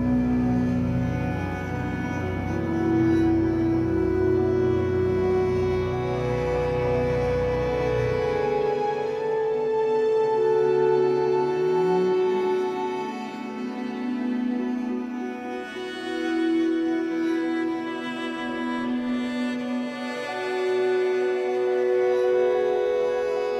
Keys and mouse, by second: 4.0 space, 5.2-6.4 ctrl+alt+drag, 8.0-9.6 drag, 9.8-10.9 typing, 12.7 Escape, 13.8 click, 14.4 click, 15.3-16.4 typing, 17.3 Escape, 18.2 click, 18.2-20.9 typing, 21.9-23.5 drag.